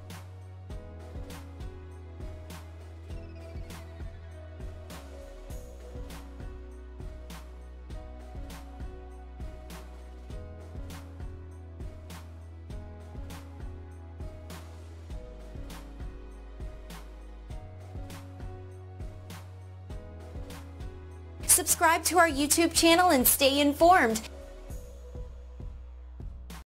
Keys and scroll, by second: 13.2 Return.